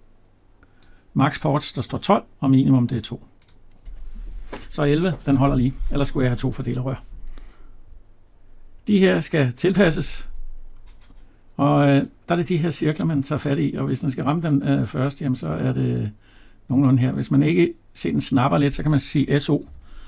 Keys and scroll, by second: 5.0 Escape.